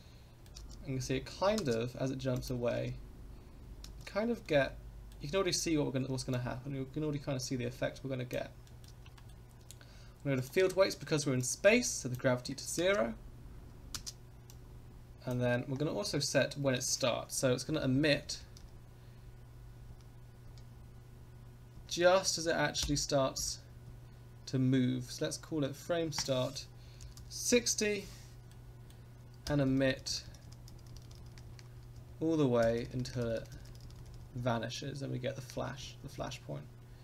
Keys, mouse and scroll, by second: 0.5 space, 1.6 space, 2.4 click, 2.7 space, 3.8 space, 4.4-5.1 middle drag, 6.3-8.3 drag, 8.6 middle click, 9.1 shift+middle drag, 10.3 click, 11.4 click, 12.8 space, 14.0 space, 14.5-15.3 drag, 15.7-16.1 scroll up 4, 17.4 Left, 17.7 Left, 17.9 Right, 18.1 Right, 18.3 Right, 18.6 Right, 19.9 Right, 20.5 Right, 21.8 Right, 22.8 Right, 23.4 Right, 23.9 Left, 26.1-28.0 drag, 28.5 middle click, 29.5 Right, 29.7 Right, 29.9 Right, 30.1 Right, 30.3 Right, 30.5 Right, 30.7 Right, 30.9 Right, 31.1 Right, 31.2 Right, 31.3 Right, 31.5 Right, 31.9 KP_0, 32.6 Right, 32.8 Right, 32.9 Right, 33.1 Right, 33.2 Right, 33.4 Right, 33.5 Right, 33.7 Right, 33.8 Right, 34.0 Right, 34.1 Right, 34.3 Right, 35.5 Left, 35.8 Left, 36.0 Left, 36.2 Left.